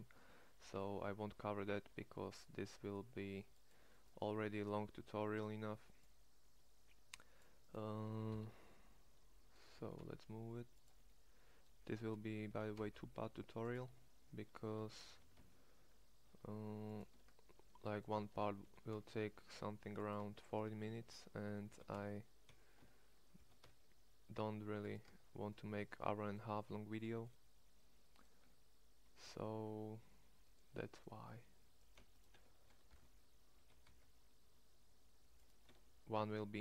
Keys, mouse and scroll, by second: 0.2 Tab, 0.8 a, 1.9 c, 4.7 c, 8.3 ctrl+l, 9.7 g, 12.5 g, 13.7 Tab, 14.9 Tab, 15.1 g, 17.1 Tab, 18.3 Tab, 18.7 g, 20.3 Tab, 21.7 g, 22.8 Tab, 23.4 g, 25.1 Tab, 28.4 Tab, 31.4 a, 33.0 ctrl+l, 33.5 g, 35.7 Tab.